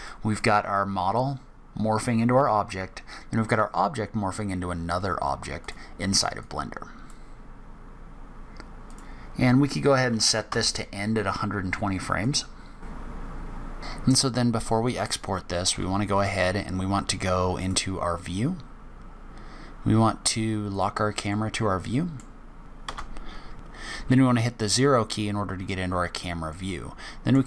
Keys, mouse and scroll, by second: 5.6 click, 6.4 click, 8.9 click, 12.2 click, 13.0 click, 13.4 click, 14.8 click, 15.7 n, 17.6 click, 21.3 middle click, 22.4-22.8 scroll down 10, 22.6 scroll up 8, 22.8 KP_0, 24.5-25.7 scroll up 9, 26.5 middle click.